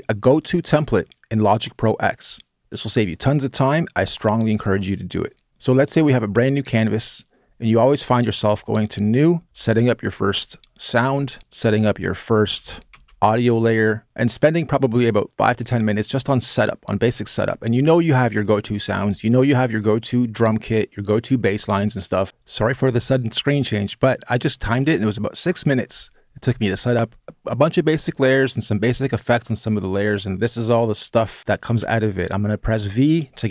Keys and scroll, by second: 8.2 Left, 9.3 Return, 12.0-13.3 typing, 31.6 v.